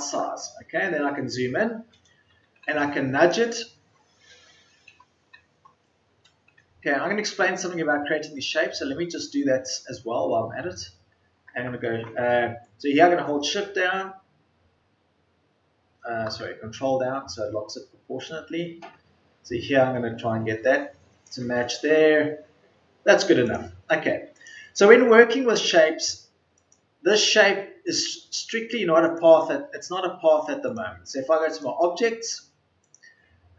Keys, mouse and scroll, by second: 3.0 ctrl+Left.